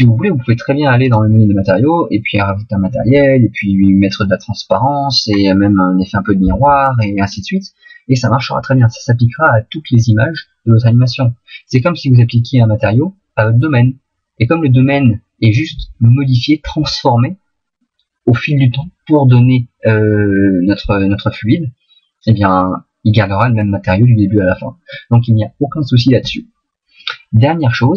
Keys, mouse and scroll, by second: 2.0 click, 5.3-7.6 scroll down 1, 26.1 middle click.